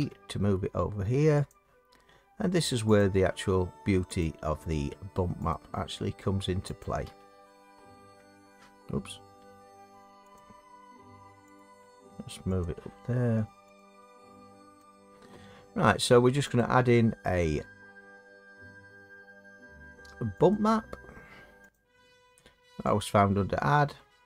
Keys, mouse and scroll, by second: 0.0 g, 3.0 click, 4.2 click, 4.5 g, 5.5 click, 6.8 click, 7.1 g, 10.4 click, 11.6 click, 11.8 g, 12.6 click, 13.8 click, 14.1 g, 14.9 click, 16.6 click, 20.5 click, 21.7 click, 23.0 click.